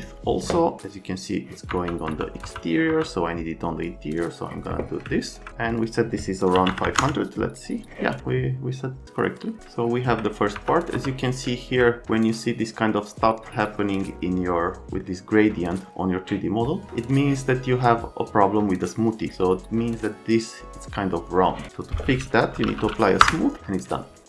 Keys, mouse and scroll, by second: 1.7 F3, 2.0 F3, 2.4 F3, 2.9 F3, 6.5 KP_5, 6.7 KP_0, 6.8 KP_0, 7.0 KP_Enter, 9.6 alt+middle click, 10.5 F3, 10.8 middle click, 11.0 F1, 11.4 alt+Scroll_Lock, 22.3-23.1 typing, 23.2 Return.